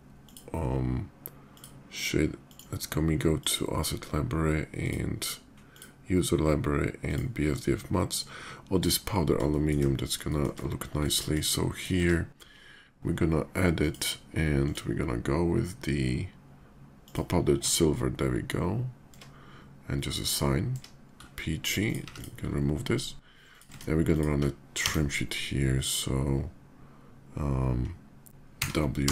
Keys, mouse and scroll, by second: 1.3 click, 2.1 click, 3.1 click, 4.5 click, 5.3 click, 6.7 click, 7.7 click, 9.3 shift+middle drag, 10.0 shift+middle drag, 10.8 shift+middle drag, 11.0 shift+drag, 11.5 shift+click, 12.5 alt+Tab, 13.6 click, 14.4 alt+drag, 16.8 click, 17.6 Tab, 19.9 click, 21.0 Tab, 21.6 click, 21.9 x, 23.3 click, 23.4 Tab, 23.9 alt+click, 24.6 d, 28.2 w, 28.8 d, 28.9 w.